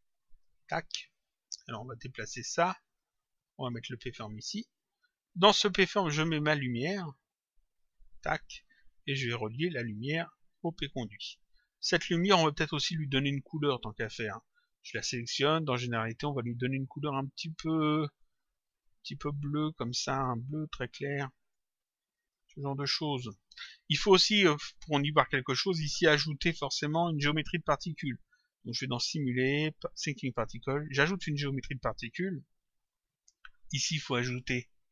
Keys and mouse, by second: 1.5 click, 3.8 click, 6.7 click, 9.5 click, 13.7 click, 15.9 click, 17.9 click, 22.1 click, 25.5 click, 28.9 click, 30.8 click, 34.4 click.